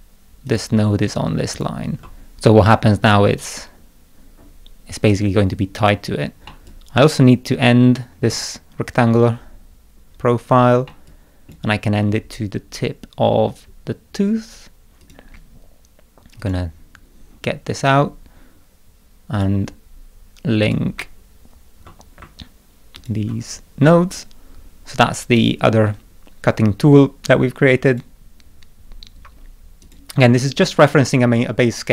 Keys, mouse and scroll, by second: 0.4 click, 1.5 ctrl+click, 6.4-8.3 middle drag, 6.6-8.3 drag, 10.1 scroll down 2, 10.5 scroll up 2, 10.8 middle click, 11.0 click, 15.0 click, 16.4 click, 19.3 click, 20.6 click, 22.9 ctrl+click, 27.8 click, 29.8 click.